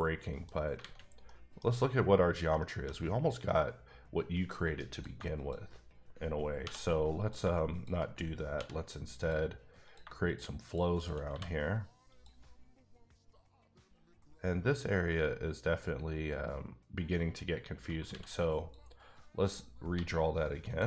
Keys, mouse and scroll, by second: 0.8 alt+a, 1.3 middle click, 1.8-2.4 scroll up 1, 2.4 shift+scroll up 1, 2.6 shift+middle click, 4.9 click, 6.6 j, 7.2 click, 8.5 j, 9.2 click, 9.8 click, 10.6 shift+double click, 10.9 shift+click, 11.3 f, 12.1 click, 15.0 click, 18.1 x, 18.5 click, 19.5 click, 19.9 g, 20.7 click.